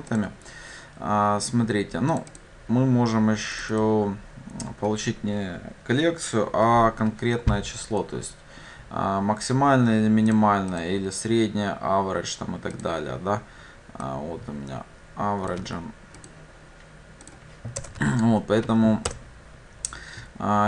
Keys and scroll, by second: 0.2 ctrl+v, 15.7 ctrl+c, 19.2 ctrl+v.